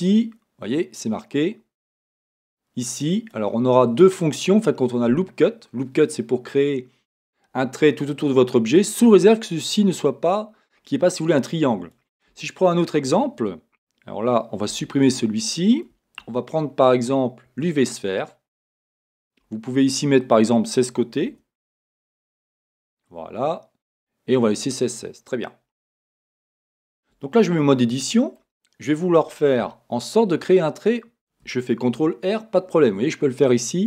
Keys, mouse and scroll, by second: 3.3 click, 3.9-18.5 drag, 12.3 Tab, 14.7 x, 16.2 shift+a, 18.5-20.2 middle drag, 20.2-24.8 drag, 22.9 Return, 24.8-27.7 middle drag, 26.1-26.8 scroll, 27.7 Tab, 28.6-29.6 scroll up 1, 29.6 a, 31.9 ctrl+r.